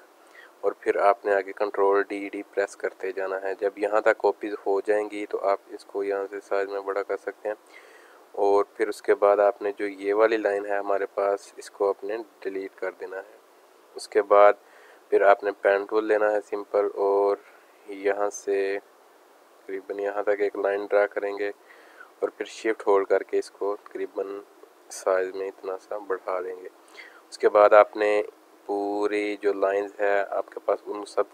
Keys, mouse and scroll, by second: 2.1 ctrl+d, 2.4 ctrl+d, 5.8 click, 7.3 click, 7.9 space, 8.0 click, 10.2 click, 10.2 click, 10.9 click, 11.5 click, 16.0 click, 16.1 click, 18.7 click, 19.6 click, 21.4 click, 24.8 click, 24.8 click, 25.1 space, 25.2 click, 25.7 alt+scroll down 2, 26.0 space, 26.1 click, 27.3 click, 30.2 space, 30.3 click, 30.7 space.